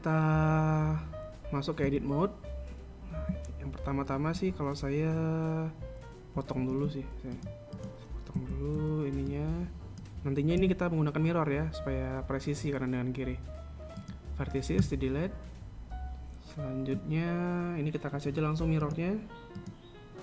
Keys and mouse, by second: 2.9 Tab, 7.4 r, 9.2 a, 9.6 b, 11.4 x, 19.6 click.